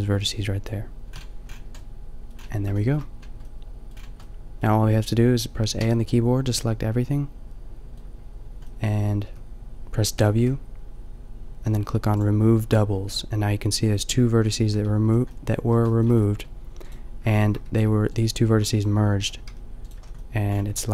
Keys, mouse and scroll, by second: 1.1 a, 5.7 a, 9.3 w, 10.1 w, 15.0 a, 17.7 g, 19.5 g, 20.0 a, 20.8 click.